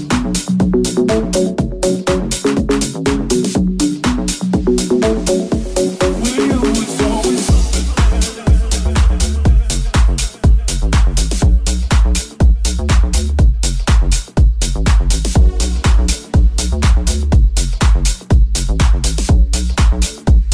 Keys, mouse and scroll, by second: 0.6 Tab, 2.5 Tab, 2.5 z, 3.2 z, 5.9 click, 6.9-15.6 middle drag, 15.6-20.5 drag, 16.3 Tab.